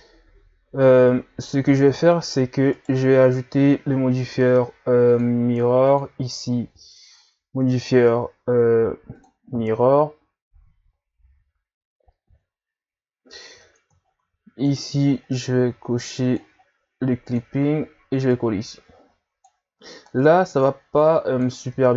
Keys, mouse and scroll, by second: 2.7 right click, 5.1 click, 5.8-8.8 drag, 10.6 scroll down 1, 11.1-11.4 scroll up 2, 12.2 scroll down 2, 13.2 scroll up 1, 13.5 Tab, 14.0-14.7 scroll up 4, 14.7 right click, 15.3-17.3 drag, 18.3-21.8 drag, 21.8 Tab.